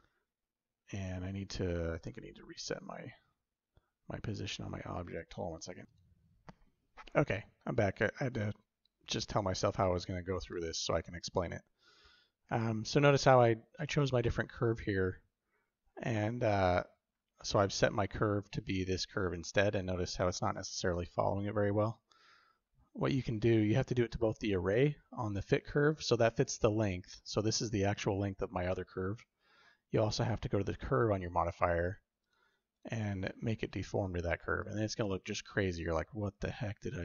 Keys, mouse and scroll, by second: 1.9 alt+g, 4.5 shift+middle click, 4.8 shift+drag, 30.1 click, 32.6 click, 35.5-36.8 shift+drag, 36.8-37.0 shift+middle drag.